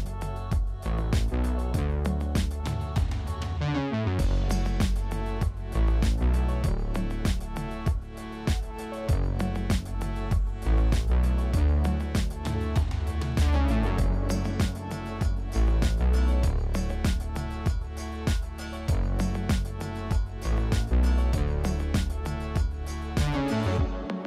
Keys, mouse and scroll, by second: 1.8-2.5 scroll up 1, 2.5-3.9 shift+middle drag, 3.9 click, 4.5 click, 6.1 click, 7.9 click, 8.5 KP_0, 8.7 KP_Enter, 9.5 click, 9.9 click, 11.1 click, 11.8 click, 12.7 KP_0, 12.9 KP_Enter, 13.9 click, 14.3 click, 16.5 Tab, 16.8-17.5 scroll up 1, 17.5 click, 18.2 ctrl+r, 19.6 Tab, 19.9 click, 20.8 click, 21.4 drag, 21.7 click, 22.0-23.0 scroll down 2, 23.2 click.